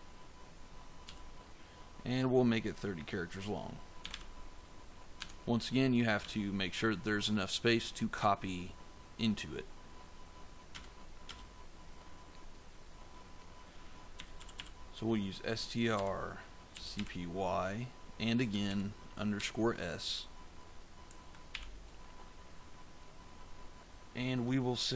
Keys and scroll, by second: 1.0 [, 3.7-4.5 typing, 5.1 Tab, 6.1 ;, 10.6 Return, 13.8-17.4 typing, 18.6 shift+-, 19.3 s, 21.4 shift+9.